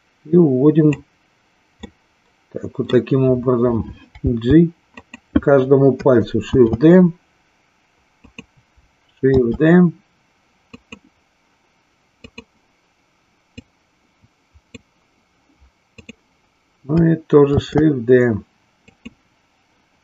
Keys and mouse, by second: 1.9-3.0 middle drag, 4.2 g, 5.1 click, 6.3 shift+d, 8.2 click, 10.9 click, 12.2 click, 13.6-14.7 drag, 16.0 click, 17.5 shift+d, 18.9 click.